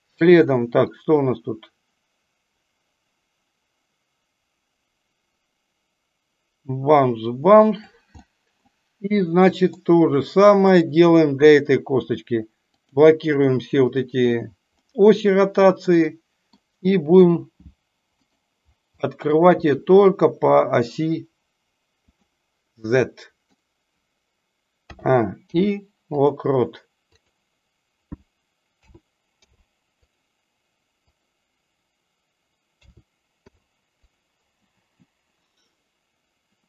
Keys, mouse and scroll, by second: 1.1-7.9 drag, 8.1 middle click, 9.5 middle click, 10.6 click, 14.7-15.7 middle drag, 15.9-16.5 middle drag, 18.9-19.4 middle drag, 23.0-23.4 middle drag, 27.1 click, 31.0 click, 35.4-36.6 drag.